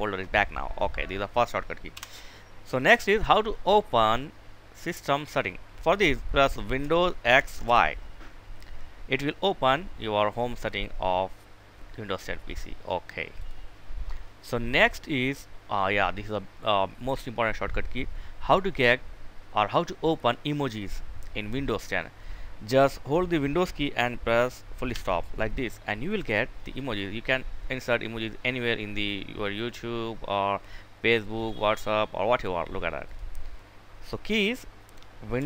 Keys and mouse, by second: 0.5 click, 1.1 Delete, 6.6 super+x, 6.9 super+y, 12.5 click, 12.8 click, 32.3 click.